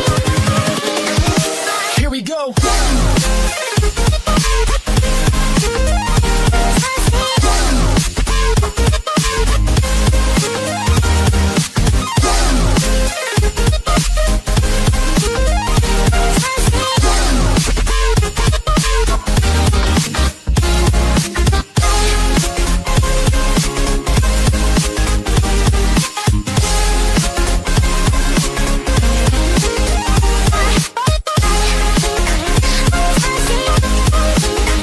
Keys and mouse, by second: 0.0-0.1 typing, 1.5 click, 4.8 click, 6.6 click, 8.6 click, 10.2 click, 10.2 KP_5, 10.4 KP_0, 13.6 KP_3, 13.8 click, 13.8 KP_6, 13.8 KP_3, 13.9 KP_0, 14.4 KP_Add, 15.2-16.9 typing, 15.5 KP_Add, 15.7 KP_Add, 16.9 Return, 18.0 Return, 18.0 KP_5, 27.5 click, 28.4 KP_0, 28.6 Return, 32.8 click.